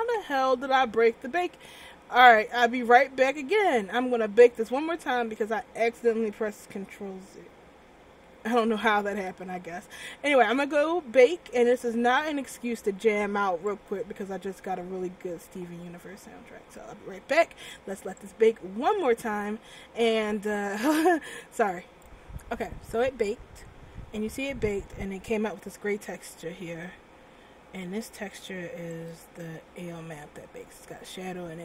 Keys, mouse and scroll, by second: 3.5 click, 13.8 click, 15.8-17.1 scroll up 6, 18.3 click, 20.2-20.7 scroll down 3, 29.3 click, 30.0 scroll down 1, 30.5-31.5 scroll up 2.